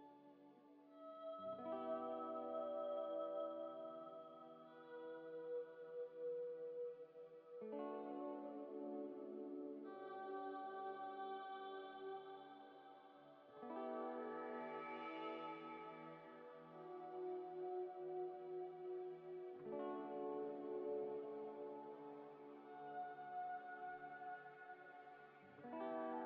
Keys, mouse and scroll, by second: 2.3 double click, 3.0 scroll up 1, 3.0 scroll down 1, 5.1 scroll up 1, 5.6 middle click, 5.9 scroll up 1, 12.2 middle click, 12.9 scroll up 1, 13.6 middle click, 13.7 scroll up 1, 18.3 scroll down 1, 19.2 middle click, 19.9 g, 20.2 y, 21.5 g, 21.7 z, 22.2 double click, 22.8 z, 23.2 z, 23.9 z.